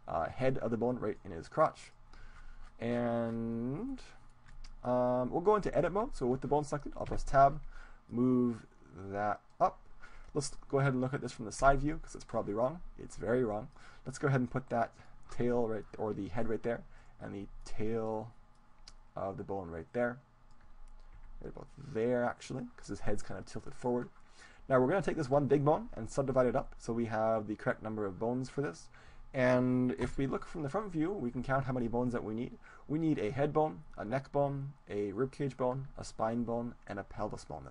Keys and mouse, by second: 1.2-3.2 drag, 3.2-6.0 middle drag, 7.2 Tab, 8.2-10.0 drag, 11.6 KP_3, 13.0-14.9 right drag, 13.9-16.2 drag, 17.0 right click, 17.9-18.9 middle drag, 18.9-20.6 drag, 21.2 g, 23.0-24.5 drag, 24.5-26.3 right drag, 29.4-31.2 middle drag, 30.1 KP_1.